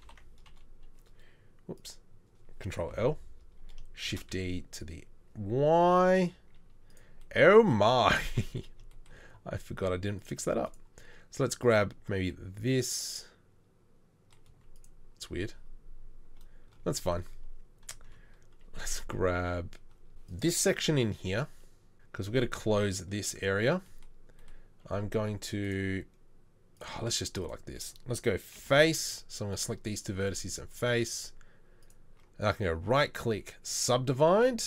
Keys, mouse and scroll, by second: 0.0 ctrl+l, 0.5 KP_3, 2.9 ctrl+l, 4.1 shift+d, 14.5 z, 18.1 KP_1, 19.4 KP_3, 28.6 f, 30.2 f.